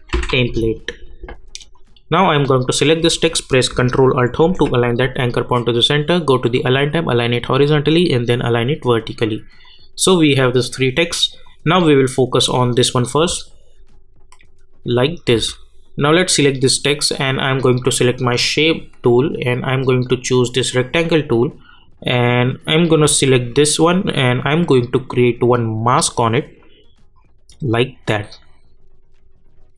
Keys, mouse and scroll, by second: 0.0-0.7 typing, 1.7 click, 4.4 ctrl+alt+Home, 6.5 click, 13.2 space, 15.3 space, 16.2 click, 24.4-29.7 drag.